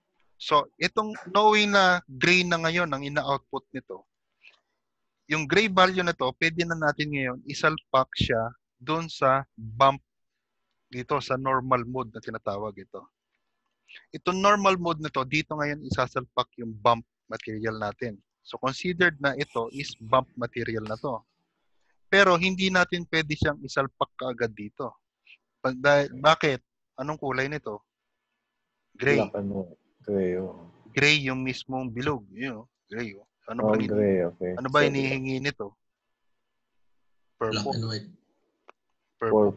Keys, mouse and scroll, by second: 0.6 ctrl+shift+click, 1.6 ctrl+shift+click, 9.9 click, 9.9 middle click, 9.9 g, 11.7 scroll up 4, 12.2 scroll up 6, 12.9-13.9 scroll up 4, 19.2 shift+middle click, 19.2 scroll down 10, 20.2 click, 20.2 g, 23.4 click, 30.8 click, 31.7-32.7 scroll up 5, 32.7 scroll up 3, 33.0 click, 33.5-33.9 scroll down 3, 37.0 middle click, 37.0-37.3 scroll down 4.